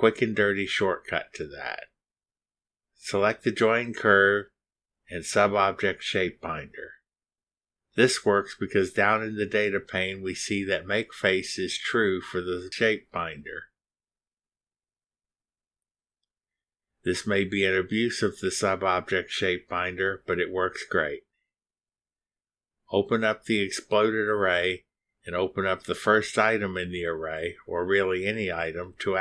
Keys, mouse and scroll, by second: 1.4 click, 7.2 click, 9.8 click, 11.7 click, 12.7 scroll down 1, 14.4-14.7 scroll down 2, 15.0 scroll up 1, 16.7 scroll up 1, 21.3 scroll up 1, 23.1 click, 24.6 click, 25.0 space, 28.6 click.